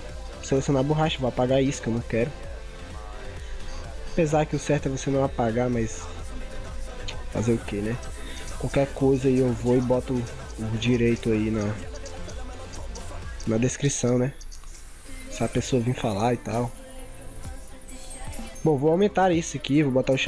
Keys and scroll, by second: 10.0 ctrl+t.